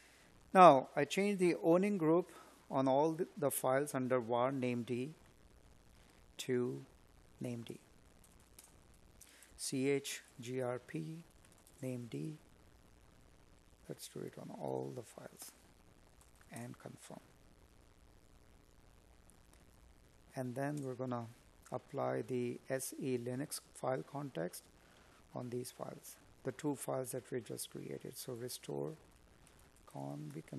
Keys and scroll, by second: 6.9 space, 7.9 space, 25.7 space, 28.0 space.